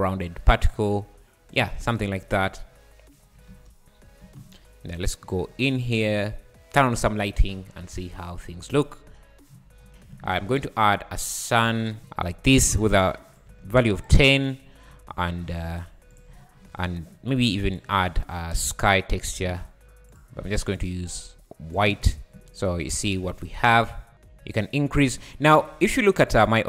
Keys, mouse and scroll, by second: 1.8 `, 2.9-3.2 scroll down 1, 3.2 `, 3.5 space, 4.2 space, 8.7 click, 9.7 `, 10.3 shift+a, 12.0 r, 12.7 click, 13.3 click, 14.0 click, 14.6 `, 15.3 r, 16.3 `, 16.9 scroll up 3, 17.7 click, 19.5-20.2 drag, 22.0 `, 22.4 `, 23.9 scroll down 3, 25.7 space.